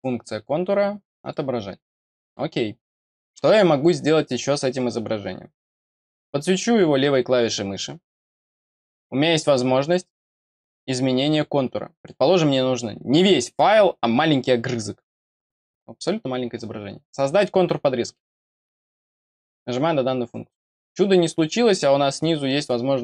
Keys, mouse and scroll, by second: 1.1 click, 2.7 middle click, 6.3 click, 18.7 click.